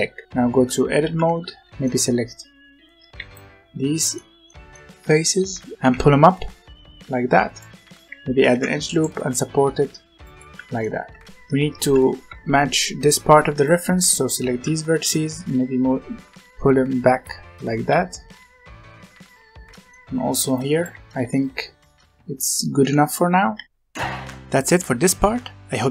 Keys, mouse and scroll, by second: 0.6 Tab, 1.0 z, 1.4 alt+a, 1.7-3.1 middle drag, 3.1 b, 4.0-5.7 middle drag, 5.7 g, 8.4 ctrl+r, 10.5 z, 10.7 middle click, 11.2 scroll up 1, 11.3 1, 11.8 z, 12.2 alt+a, 13.2 b, 14.5 g, 17.7 z, 18.4-20.1 middle drag, 20.1 alt+a, 20.4 b, 20.8 g, 21.0 Tab, 21.7-22.7 scroll up 2, 22.7 Tab, 23.1-23.5 scroll down 1, 23.5 alt+a, 24.0-25.9 scroll down 1.